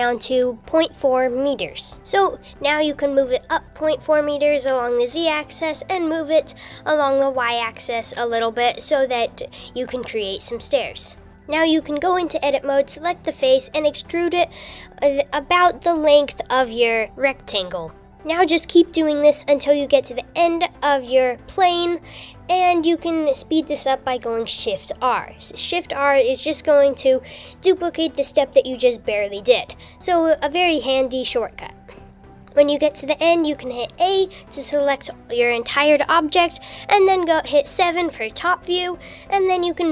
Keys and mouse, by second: 7.1 g, 12.0 Tab, 12.3 click, 13.5 e, 19.6 r, 19.9 super+z, 21.1 e, 25.3-26.5 typing, 30.1 shift+r, 30.5 shift+r, 30.6 shift+r, 30.8 shift+r, 34.6 l, 36.1 KP_6, 36.8 KP_7, 39.6 g.